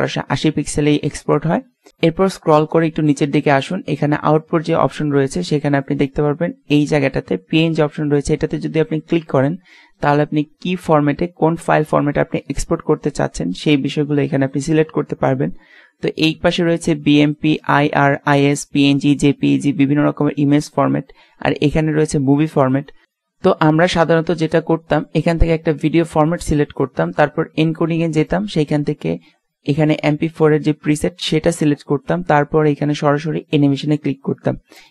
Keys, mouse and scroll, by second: 6.2-8.3 middle drag, 9.3-11.2 drag, 26.9-30.3 drag, 33.1-34.9 middle drag.